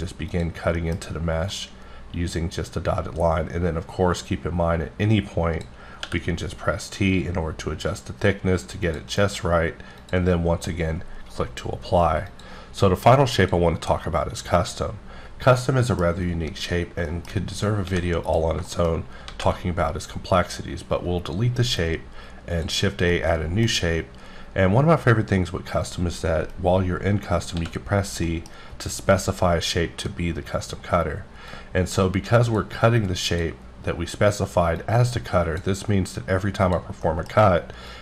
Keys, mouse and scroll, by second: 0.3 click, 0.8 middle click, 1.5 click, 1.5-1.8 scroll, 6.0 t, 8.8 click, 10.0 click, 12.3 click, 14.1 click, 15.3 scroll down 1, 15.6 middle click, 16.1 scroll down 1, 16.7 scroll down 2, 17.0 shift+middle click, 17.8 x, 18.5 shift+click, 18.7 shift+middle click, 19.3 shift+a, 20.3 click, 23.1 middle click, 27.6 c, 28.2 middle click, 31.5 click, 33.3 click, 34.8 click, 36.6 click, 37.0 middle click, 37.9 click.